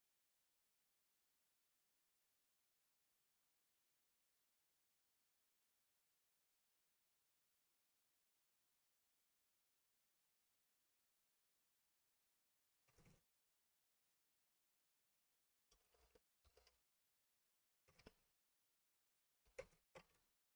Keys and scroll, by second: 9.3 super+BackSpace, 19.6 super+BackSpace.